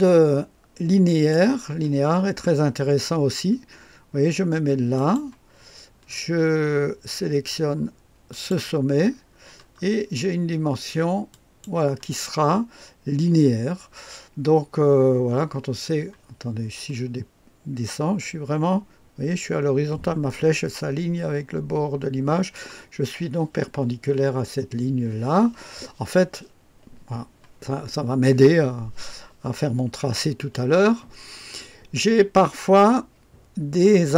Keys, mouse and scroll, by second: 1.1 click, 4.9 click, 6.1-8.3 scroll up 2, 8.3 click, 9.1-11.3 scroll down 2, 11.3 click, 16.9-19.3 middle drag, 19.3-19.9 scroll down 1, 19.9-22.0 middle drag.